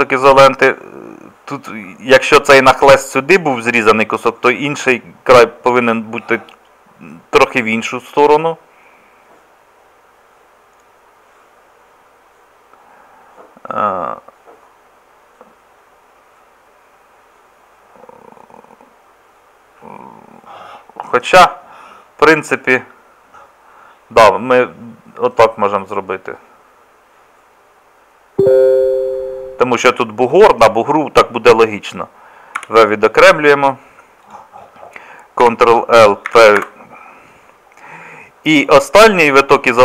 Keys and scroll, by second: 32.6 v, 35.4 ctrl+l, 36.3 p.